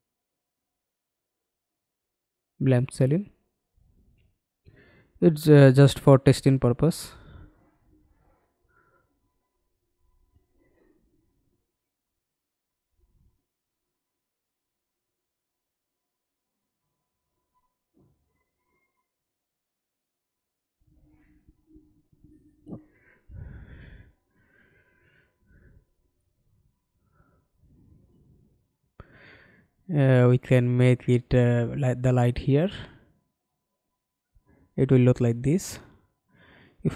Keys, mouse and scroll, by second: 0.1 f, 0.6 e, 3.4 w, 7.7 f, 8.4 alt+click, 14.3 alt+click, 15.0 f, 15.5 scroll up 1, 19.3-19.6 alt+scroll down 2, 19.6 alt+click, 20.5 alt+scroll up 1, 32.6 shift+click.